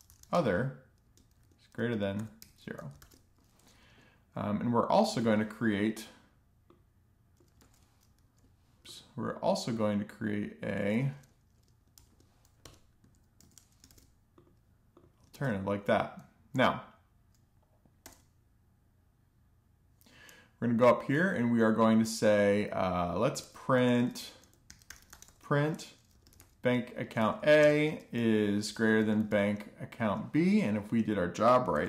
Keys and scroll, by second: 0.0-1.3 typing, 1.4 alt+shift+f, 3.5 alt+shift+Down, 6.0 super+d, 9.2 super+d, 10.0 space, 10.3 shift+,, 11.0 Escape, 11.4 Right, 11.8 Right, 12.2 alt+shift+f, 13.7 alt+shift+f, 16.4 super+s, 21.7 Return, 22.1-25.2 typing, 25.6 Down, 25.9 Return, 26.7-28.3 typing, 28.7 Return, 30.0 shift+0, 30.4 ;, 30.7 alt+shift+f, 31.1 super+s.